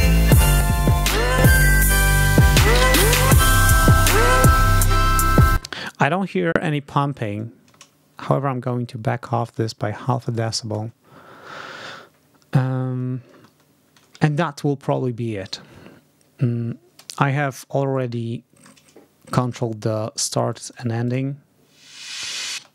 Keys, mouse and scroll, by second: 0.4 click, 1.2 click, 5.4 space, 7.2-10.4 drag, 13.2 ctrl+scroll down 2, 17.7 ctrl+scroll up 2, 20.4 click, 20.6 right click, 20.9 click, 22.1-22.4 ctrl+scroll up 2, 22.4 ctrl+space.